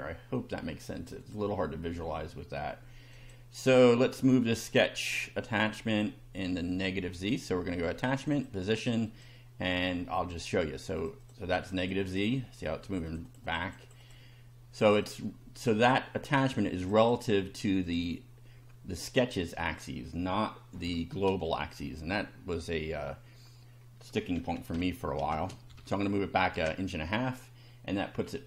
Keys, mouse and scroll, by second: 1.2 click, 2.1 middle click, 3.1 click, 5.9 click, 8.3 click, 9.1 click, 11.0 click, 11.6 click, 12.9 click, 14.8 click, 15.6 click, 16.8 click, 17.9 click, 19.0 click, 24.4-25.7 typing, 26.5 Return, 28.0-28.4 scroll up 2.